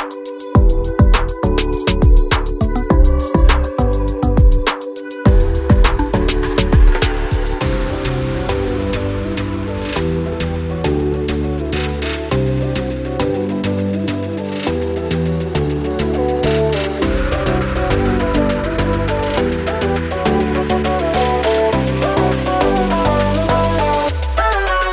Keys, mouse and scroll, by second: 15.8 click, 16.1 scroll up 1, 17.1 click, 17.5-17.8 alt+scroll down 2, 18.9 click, 22.2 alt+scroll up 2, 23.0 click.